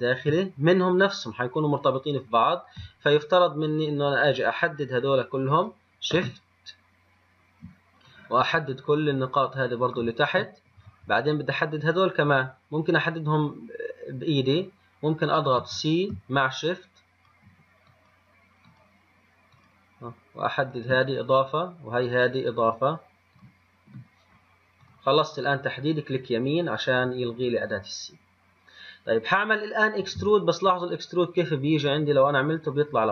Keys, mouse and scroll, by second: 4.7 click, 8.3-11.3 shift+drag, 15.8 c, 30.3 e.